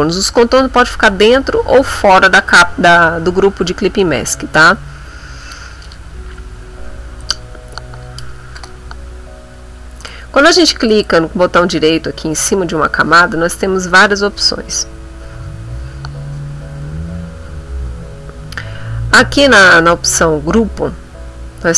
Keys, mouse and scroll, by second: 2.3 click, 5.4 click, 7.3 click, 10.1 click, 10.9-21.7 drag.